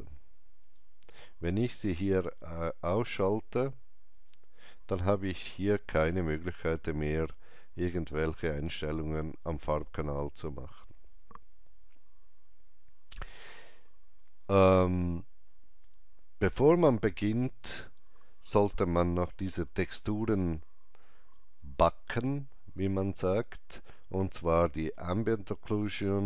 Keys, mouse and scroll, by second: 1.5 scroll down 1, 4.1 click, 4.1 scroll down 1, 6.0-6.4 scroll up 1, 10.2 click, 10.2 scroll up 1, 19.5 click, 19.5-20.0 scroll up 1, 21.7 alt+right click.